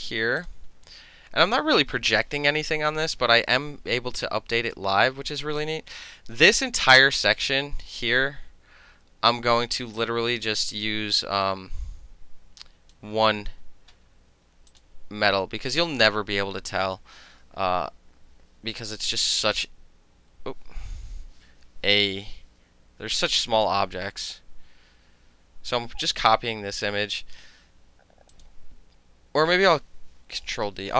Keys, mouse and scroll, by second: 0.4 click, 3.9 space, 4.2 click, 9.7 space, 10.0-13.0 drag, 14.7 click, 19.0 ctrl+t, 22.1 Return, 23.8 ctrl+c, 28.4 click, 30.5 ctrl+d.